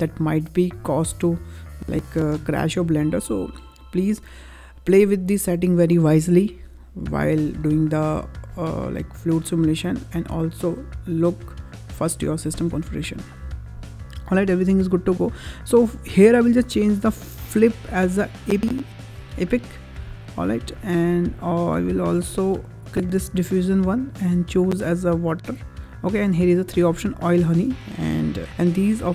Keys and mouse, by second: 16.7-18.8 drag, 23.1 click, 24.0-29.1 drag.